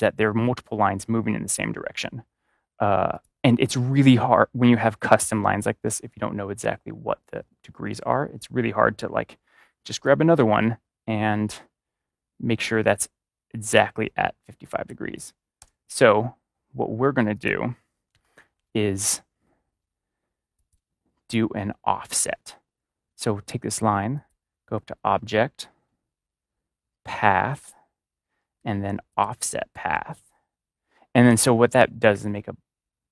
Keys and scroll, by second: 15.5 BackSpace.